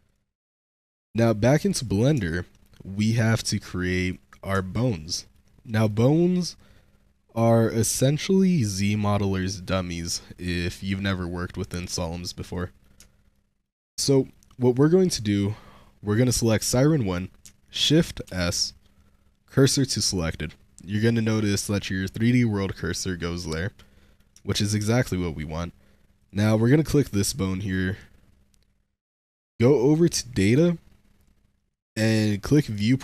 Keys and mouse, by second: 0.5-0.9 shift+middle drag, 1.5-1.9 drag, 2.2 shift+middle drag, 2.4 click, 3.9 click, 4.6-5.2 shift+drag, 5.8 click, 12.5 middle click, 13.2 shift+middle drag, 13.7-14.2 shift+middle drag, 16.5 click, 18.1 shift+s, 23.7 middle click, 24.4 shift+middle drag, 24.8-25.3 shift+middle drag, 26.1 middle click, 29.0 middle click, 32.5 middle click.